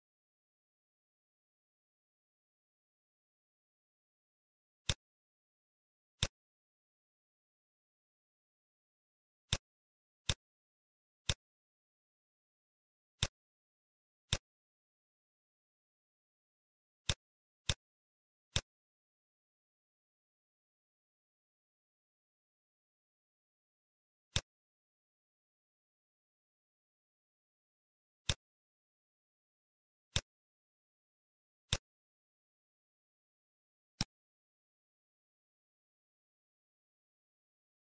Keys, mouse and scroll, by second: 1.5 scroll down 4, 1.9 middle click, 2.5-3.4 scroll up 5, 2.9 middle click, 3.4 ctrl+x, 3.4 click, 3.8 scroll down 1, 4.0 middle click, 4.7 click, 5.4 shift+a, 11.1 click, 13.1 click, 13.6 shift+a, 18.5 click, 20.1 scroll down 2, 20.6 middle click, 21.6 scroll down 1, 24.2 click, 26.1-26.7 scroll up 3, 26.8 scroll up 2, 27.0 middle click, 28.1 click, 30.1 click, 33.9 click.